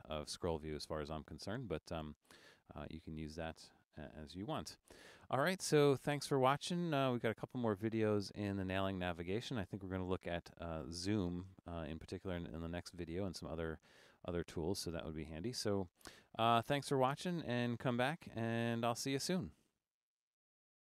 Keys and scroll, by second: 4.2 super+e.